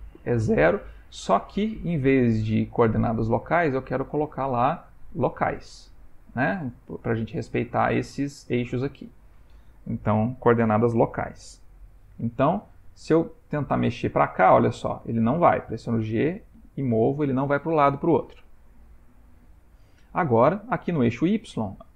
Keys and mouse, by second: 3.5 click, 12.8 middle click, 14.2 e, 15.7 g, 18.8 middle click.